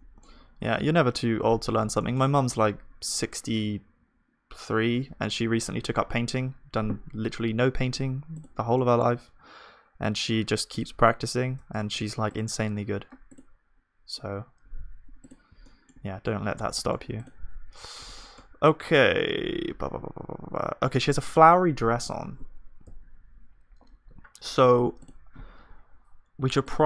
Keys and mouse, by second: 6.1 KP_1, 10.4-11.8 middle drag, 19.5-20.9 middle drag, 19.5 z, 20.9 z, 22.8 z, 24.7-26.8 middle drag, 25.4-26.8 drag.